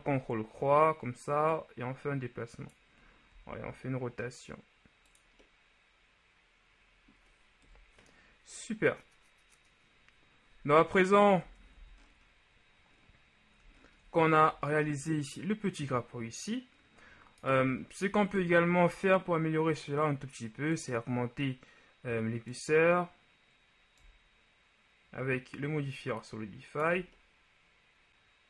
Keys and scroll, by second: 3.4 r, 7.8 KP_1, 11.6 Tab, 11.9 a.